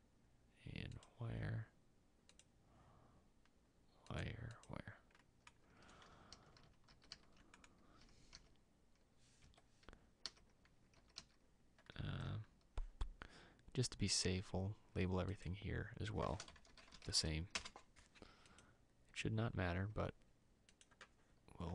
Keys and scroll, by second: 7.6 ctrl+s, 8.4 e, 11.8 Escape, 11.8 e.